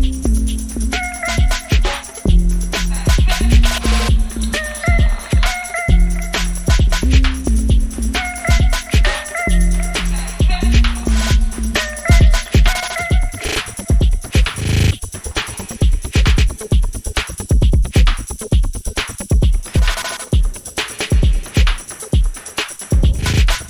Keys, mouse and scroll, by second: 4.8 click, 6.1 click, 11.6 m, 12.7 click, 13.4 ctrl+a, 14.2 ctrl+c, 15.4 click, 16.3 ctrl+v, 18.9 m, 20.9 click, 23.0 click.